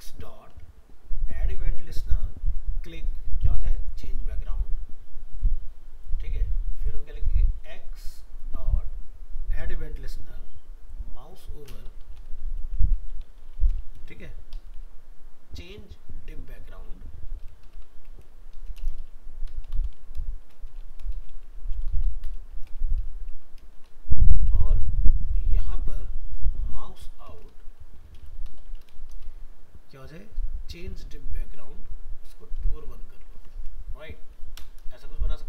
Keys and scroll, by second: 23.8 ctrl+c, 24.6 ctrl+v, 33.4 ctrl+s.